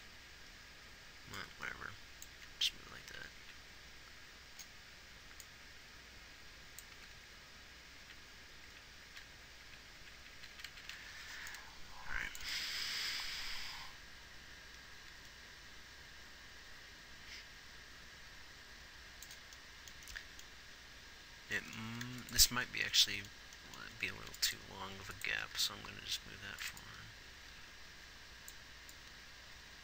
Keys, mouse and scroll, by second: 0.3 Right, 2.8 Left, 3.4 Right, 3.8 Right, 7.4 Left, 7.7 Left, 9.0 Right, 9.5 Right, 10.0-11.3 Right, 22.4 ctrl+s, 24.3 a, 25.8 g.